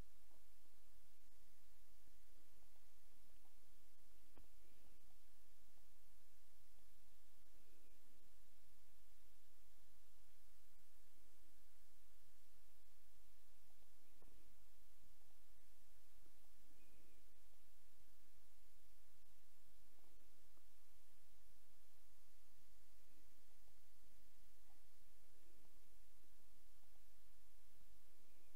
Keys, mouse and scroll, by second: 2.7 click, 4.9 click, 5.8-6.9 drag, 8.9 s, 13.7 click, 15.3 click, 16.5 click, 19.2 s, 23.5 click, 26.8 click.